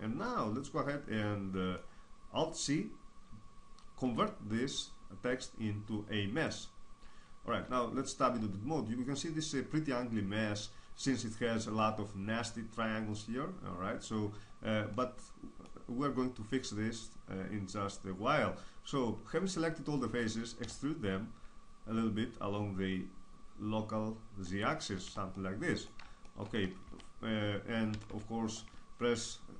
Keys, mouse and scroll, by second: 3.9 alt+c, 7.6 Tab, 8.3-20.0 middle drag, 20.6 e, 24.6-26.9 drag, 25.0 Tab, 26.9 Tab, 27.9 a, 28.1 a.